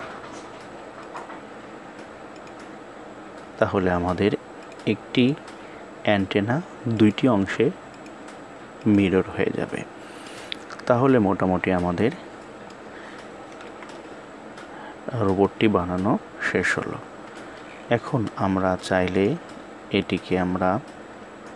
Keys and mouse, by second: 4.2 click, 6.6-7.7 drag, 8.5 click, 9.9-12.4 middle drag, 13.3 KP_1, 18.8 click.